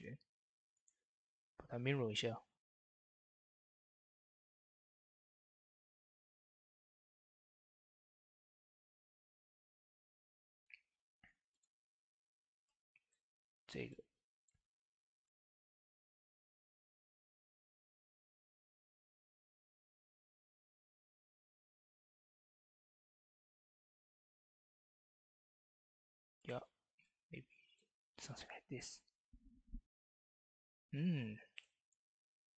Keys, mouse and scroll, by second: 0.6 right click, 2.3 click, 3.9 middle click, 4.7-10.0 drag, 10.0 Tab, 11.4-16.3 drag, 11.4 typing, 12.8 typing, 16.9 Tab, 18.0-25.6 drag, 25.6 Tab, 25.9-27.7 drag, 27.2 typing, 27.7 Tab.